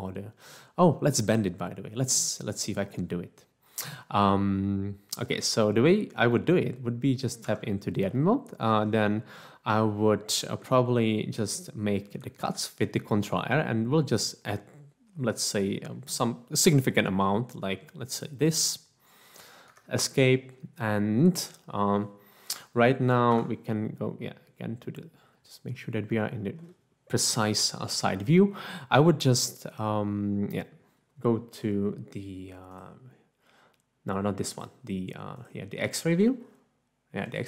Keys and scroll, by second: 7.5 Tab, 12.4 ctrl+r, 19.7 Escape, 23.3 3.